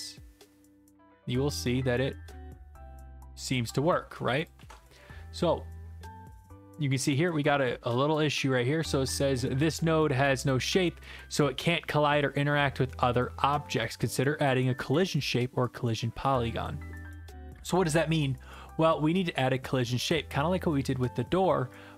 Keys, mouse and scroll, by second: 4.4 click, 5.4 ctrl+z.